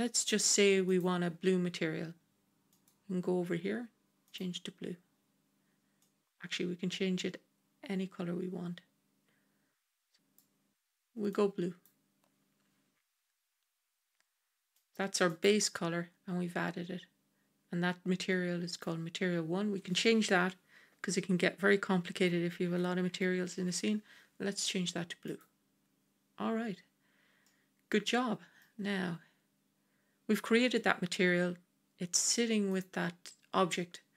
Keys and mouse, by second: 0.8 click, 2.6 click, 14.6 click, 18.6-25.2 drag, 27.3-28.5 middle drag, 32.6 click.